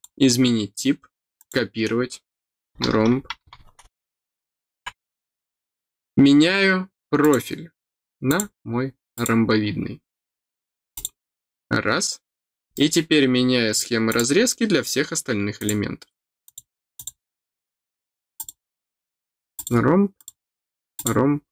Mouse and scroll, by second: 1.3 click, 7.2 click, 8.2 click, 9.1 click, 10.9 click, 12.7 middle click, 14.0-15.6 drag, 16.4 click, 16.9 click, 18.3 click, 19.5 click, 20.1 click, 20.9 click.